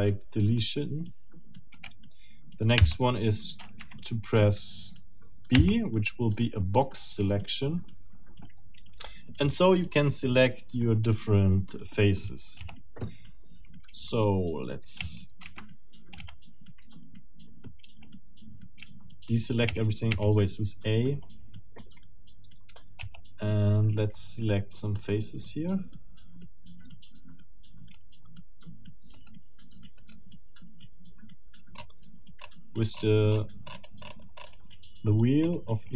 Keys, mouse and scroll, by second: 2.9 b, 3.8 Escape, 6.4-7.5 middle drag, 6.4 b, 12.6 c, 13.9 a, 15.4 Escape, 16.2 a, 17.8 a, 23.0 c, 24.9-28.1 middle drag, 29.1 middle click, 30.0 middle click, 31.5 scroll down 2, 31.7-32.1 scroll up 2, 32.4 scroll up 2, 32.7 scroll down 2, 32.9 scroll up 2, 33.1 scroll down 2, 33.3 scroll up 2, 33.5 scroll down 2, 33.7 scroll up 2, 33.9 scroll down 2, 34.0 scroll up 2, 34.2 scroll down 2, 34.4-34.7 scroll up 2, 34.7-35.3 scroll down 4, 35.4 scroll up 2.